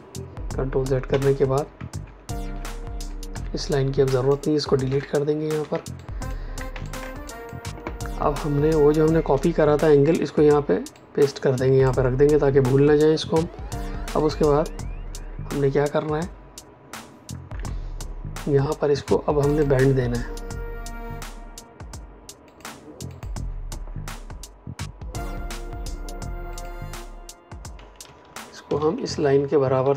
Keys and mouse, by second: 2.4 ctrl+y, 3.0-3.7 typing, 4.0 click, 4.8 Delete, 5.6 space, 5.9 click, 6.1 space, 6.8 ctrl+alt+click, 10.9 click, 19.4 click, 22.4 click, 26.4 click, 27.9 Down.